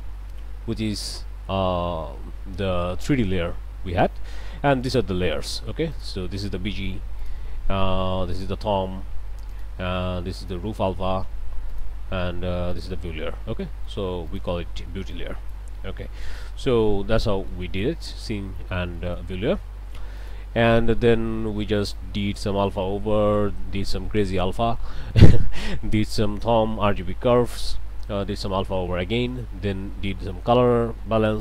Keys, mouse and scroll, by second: 0.9 click, 4.9 click, 5.9 click, 7.2 click, 8.3 click, 9.5 click, 10.4 click, 11.7 click, 12.7 click, 13.6 click, 14.3 click, 15.1 click, 15.6 Delete, 16.0 click, 17.2 click, 19.0 click, 20.2 click, 20.7 middle click, 21.2 scroll down 1, 21.6 middle click, 24.8 middle click, 27.3 click, 28.9 click, 30.7 click.